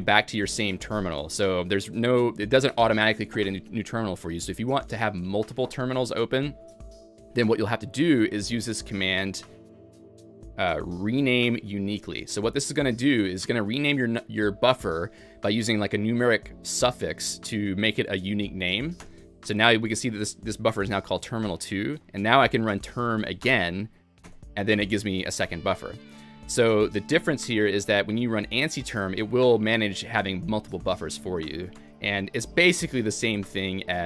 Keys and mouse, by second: 2.2-3.0 typing, 2.5 click, 5.2-5.9 typing, 5.4 click, 8.1-8.8 typing, 8.3 click, 9.6 alt+x, 9.6 Escape, 10.6-11.3 typing, 10.8 click, 11.8 alt+x, 11.8 ctrl+j, 13.2-16.9 typing, 13.4 click, 14.9 click, 15.6 click, 16.4 click, 19.2 Return, 19.3-20.1 typing, 19.6 click, 21.7-23.9 typing, 22.0 click, 22.5 Escape, 22.5 alt+x, 22.5 Return, 22.5 ctrl+j, 23.4 click, 24.3 Return, 27.1-31.8 typing, 27.4 click, 29.0 click, 30.6 click, 32.2 alt+x, 32.2 ctrl+j, 32.2 Return, 33.6 Escape.